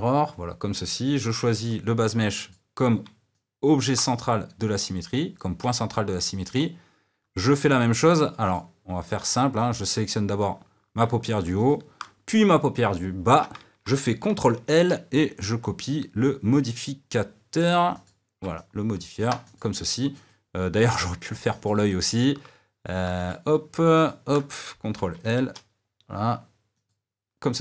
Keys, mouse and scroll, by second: 1.8 click, 3.3-6.6 middle drag, 6.6 click, 8.5 click, 11.7 shift+click, 18.6 middle click, 19.5 click, 20.3 click, 24.0 shift+click, 27.0 ctrl+l.